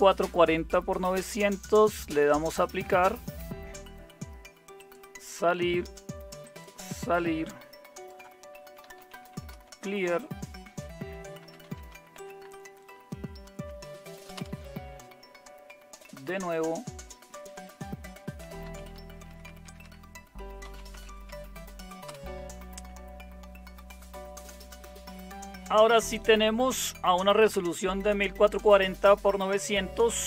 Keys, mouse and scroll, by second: 8.6-9.8 typing, 8.9 click, 11.1-12.4 typing, 14.3 super+Return, 18.2-21.4 typing, 22.0 Return.